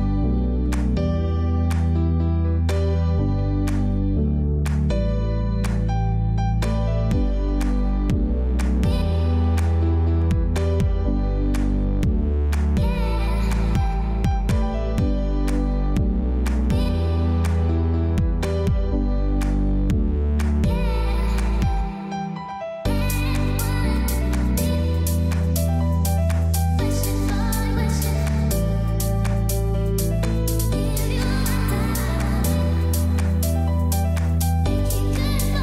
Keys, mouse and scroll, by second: 0.1 click, 0.8 z, 0.9 click, 4.4-6.8 typing, 5.7 click, 6.7 click, 6.9 click, 7.9 ctrl+shift+a, 12.3 click, 13.6 space, 13.7 click, 14.2 space, 15.1 click, 24.8 click, 27.2 click, 30.0 click, 30.5 click.